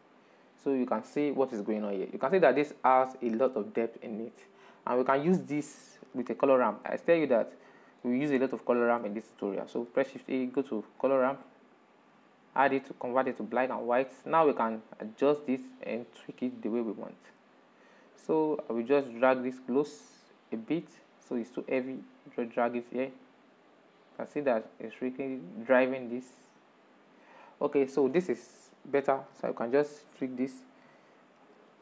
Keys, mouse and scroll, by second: 0.5-4.9 middle drag, 5.2-8.9 middle drag, 12.6-14.3 middle drag, 14.3-15.9 drag, 15.9-17.9 middle drag, 17.9-26.6 drag, 26.6-28.9 middle drag, 26.7 click, 28.9-31.1 drag, 31.1-31.8 middle drag.